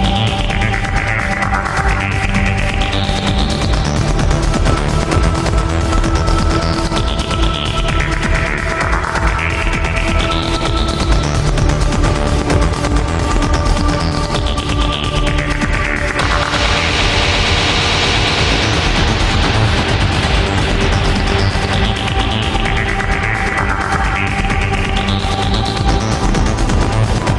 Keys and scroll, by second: 4.2 ctrl+z, 6.0 alt+space, 6.8 ctrl+z, 6.9 alt+space, 7.7 alt+space, 8.0 alt+space, 11.2 alt+space, 12.6 alt+space, 13.4 alt+space, 22.6 ctrl+z, 25.6 ctrl+z.